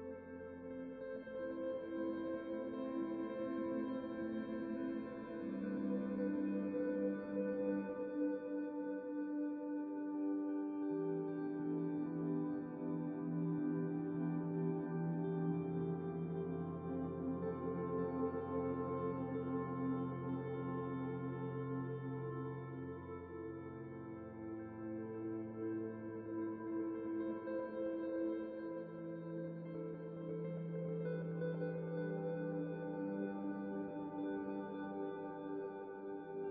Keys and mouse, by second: 0.7 click, 1.4 f, 3.1 f, 3.6-8.8 drag, 3.6 middle click, 3.6 right click, 3.6 f, 4.1-5.6 middle drag, 4.1 right click, 4.2 f, 4.7 f, 5.8-9.6 typing, 6.9-8.4 middle drag, 10.2 click, 10.2 right click, 10.6 middle click, 10.8-12.6 drag, 10.8 right click, 10.8 middle click, 11.7 f, 12.6 middle click, 13.0 click, 13.7 click, 13.9 middle click, 14.1 ctrl+s, 14.4-15.4 drag, 14.6 right click, 15.1 right click, 15.2 middle click, 15.3 ctrl+s, 15.6 click, 15.6 right click, 16.6 click, 16.6 right click, 17.2 click, 17.6 right click, 17.8 middle click, 17.8-23.1 drag, 17.8 right click, 20.9 KP_Decimal, 21.7 KP_0, 22.9 middle click, 23.4-24.5 drag, 23.7 middle click, 24.3 right click, 24.4 z, 24.6 alt+a, 24.8 ctrl+s, 24.9 click, 24.9 right click, 25.6 right click, 25.7 middle click, 25.9-28.7 drag, 26.7 ctrl+s, 27.7 KP_0, 28.1 alt+a, 29.2 middle click, 29.4 ctrl+s, 30.6 middle click, 30.7 ctrl+s, 31.5 click, 31.8 middle click, 31.9 alt+a, 32.1 ctrl+s, 32.8 ctrl+s, 33.2 z, 33.4-34.5 middle drag, 33.9-35.0 drag, 33.9 right click, 34.1 ctrl+s, 34.8 right click, 34.9 middle click, 35.2-36.5 drag, 35.2 right click, 35.6 ctrl+s.